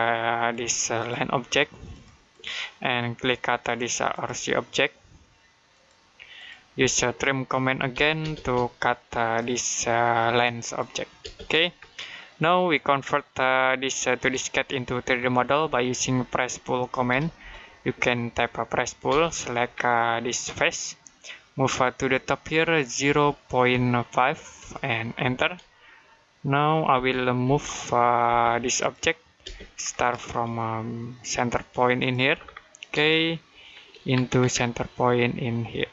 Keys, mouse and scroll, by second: 0.3 click, 6.6-8.3 typing, 9.2 click, 11.1 space, 11.8 shift+middle click, 14.6 middle click, 15.8-17.7 typing, 18.9 space, 20.4 click, 22.9 typing, 24.2-25.1 typing, 27.3 m, 28.1 space, 28.6 click, 29.3 space, 29.6-31.8 scroll up 1, 31.8 click, 32.2-32.8 scroll down 1, 33.0 shift+middle click, 34.0-35.9 scroll up 1.